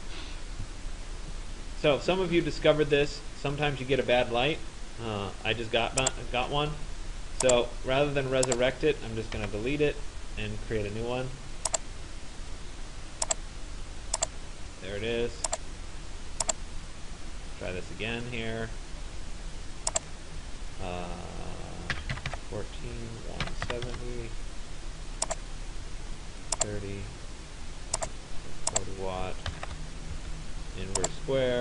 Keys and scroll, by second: 9.0 Delete, 21.6-24.4 typing, 29.1 4, 29.7 0, 30.2 Tab.